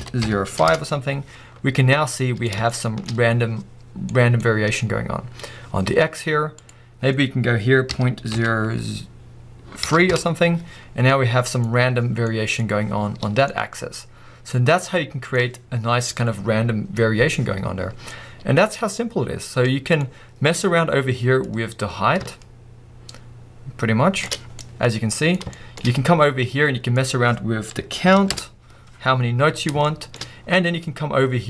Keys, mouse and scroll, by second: 0.7 click, 0.8 Return, 1.8-10.1 middle drag, 3.0-4.1 scroll up 3, 10.1 click, 10.7 Return, 10.9 scroll down 2, 11.1-11.7 middle drag, 11.7-12.3 scroll up 1, 12.3 middle click, 15.0-16.0 middle drag, 15.7-16.0 scroll down 2, 21.0-22.3 middle drag, 22.3-24.3 drag, 24.5 scroll down 1, 24.6-28.3 middle drag, 25.5 shift+scroll up 1, 28.3 click, 28.3 Return, 29.1-29.8 scroll up 1, 29.8-31.3 shift+middle drag.